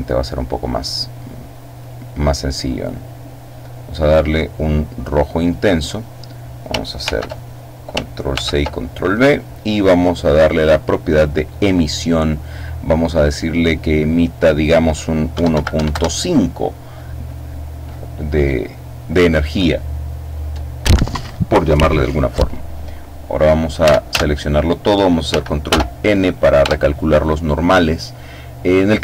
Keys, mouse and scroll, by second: 1.6 click, 2.5-5.8 drag, 6.9 ctrl+c, 8.1 ctrl+v, 9.0 click, 11.0 click, 13.8 click, 15.1 KP_1, 15.3 KP_Decimal, 15.5 KP_5, 15.7 KP_Enter, 23.6 a, 25.4 ctrl+n, 26.4 Tab.